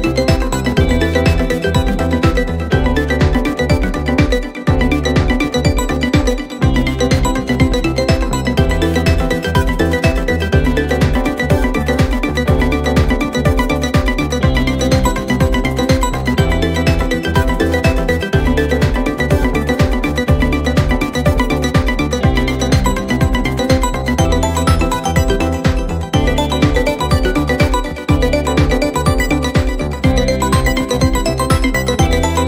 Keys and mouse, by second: 1.2 middle click, 2.6 middle click, 4.2 middle click, 7.4 middle click, 8.7 middle click, 10.5 middle click, 11.6 middle click, 12.2 middle click, 15.9 middle click, 16.6 middle click, 17.3 middle click, 18.0 middle click, 19.5 middle click, 20.8 middle click, 23.0 middle click, 23.4 middle click, 23.7 middle click, 25.9 middle click, 27.3 middle click, 28.6 middle click, 30.1 middle click, 30.9 middle click.